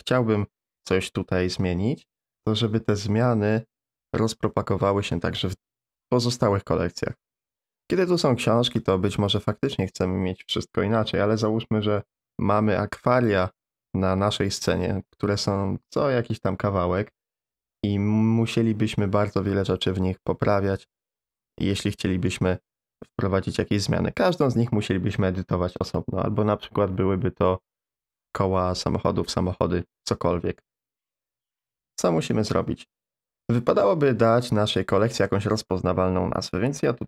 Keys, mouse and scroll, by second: 0.7 middle drag, 32.3-35.3 middle drag, 36.5-37.0 drag.